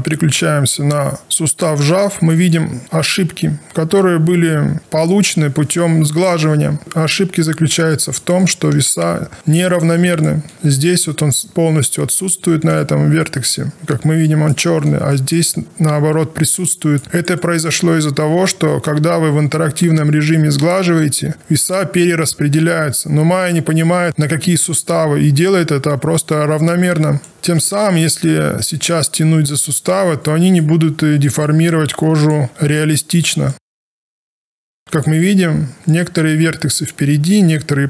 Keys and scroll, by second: 31.7 w.